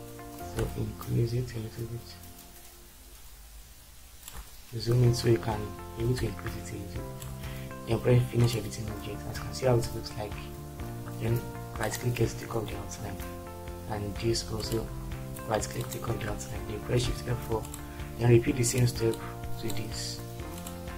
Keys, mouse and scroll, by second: 17.1 shift+F4.